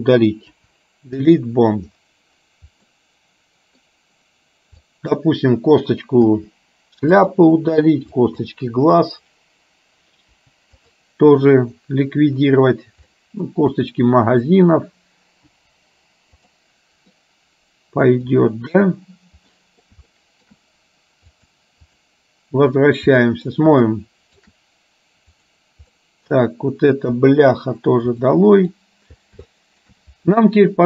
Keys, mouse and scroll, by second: 0.5 Delete, 3.0 middle click, 5.0 click, 6.4 Delete, 8.4 click, 8.7 Delete, 13.2 middle click, 13.9 click, 15.6 Delete, 17.2-18.4 middle drag, 19.6 middle click, 20.2 shift+middle click, 21.5 click, 23.2 middle click, 24.0 shift+middle click, 26.1 middle click, 27.2 Delete, 28.4 middle click, 29.6 shift+middle click.